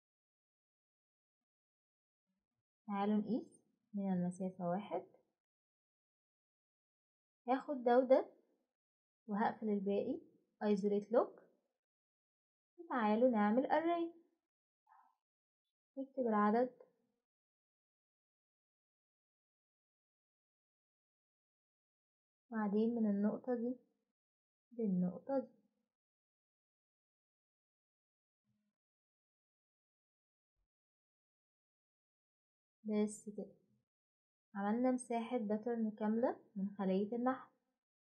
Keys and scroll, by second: 1.5 Escape, 2.2-3.0 typing, 6.3 ctrl+z, 10.8 typing, 14.6-17.2 typing, 18.1 Return.